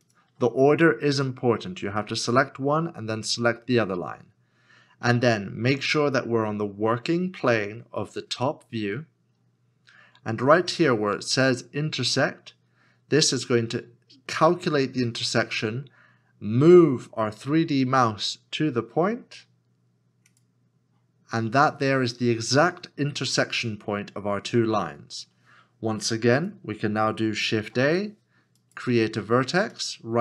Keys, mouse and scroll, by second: 0.0 shift+click, 27.6 shift+a.